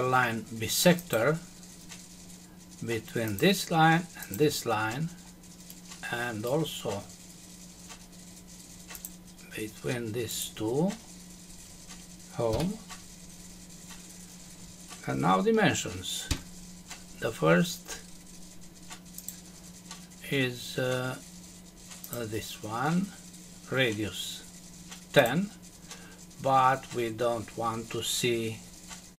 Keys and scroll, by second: 12.5 Home, 16.3 Escape.